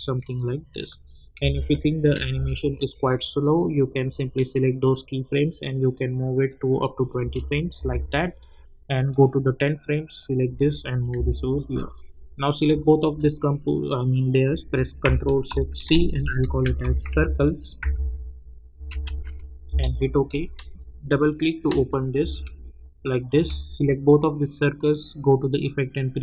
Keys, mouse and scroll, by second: 1.4 space, 3.4-6.8 drag, 7.2 space, 8.4 click, 11.1 [, 11.9 click, 12.8 shift+click, 15.8 ctrl+shift+c, 16.1-19.5 typing, 19.6 Return, 21.4 click, 22.2 space, 23.6-25.5 drag.